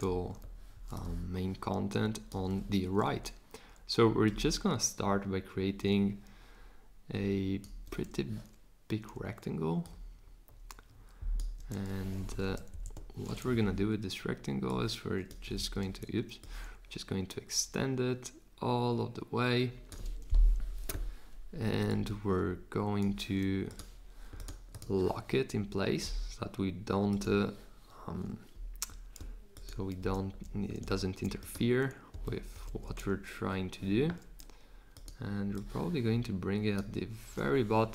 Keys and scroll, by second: 12.1 super+z, 12.7 shift+Left, 15.6 super+z, 29.9 super+c, 32.5 super+v.